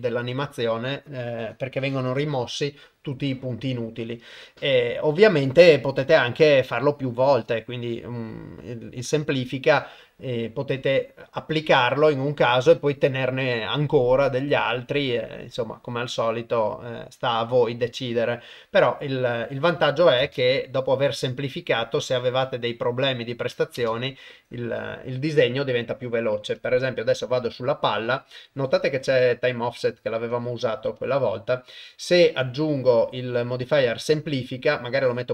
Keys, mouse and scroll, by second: 4.1-8.2 drag, 20.2 shift+space, 23.8 shift+space, 30.3 drag, 31.0-33.7 drag, 35.0-35.3 drag.